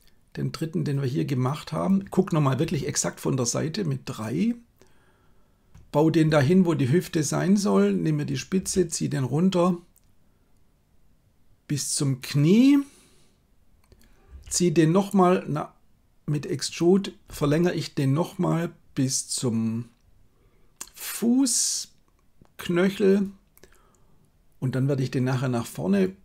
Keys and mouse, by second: 2.6 KP_3, 6.3 g, 8.7 r, 14.3 g, 17.4 e.